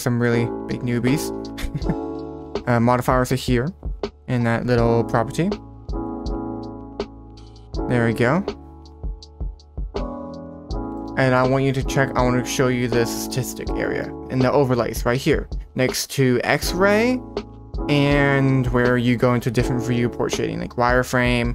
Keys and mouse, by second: 5.7-10.4 drag, 10.9 shift+middle click, 20.3 click, 21.1 click.